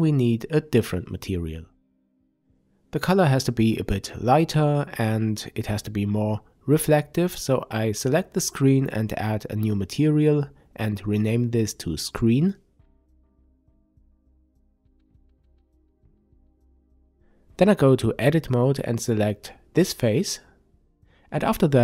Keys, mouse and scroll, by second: 2.8 click, 5.5 click, 7.0 click, 8.0 click, 8.2-16.3 drag, 9.9 e, 10.5 Return, 14.2 Tab, 17.2 click, 18.2 click, 20.6 click, 21.5 click.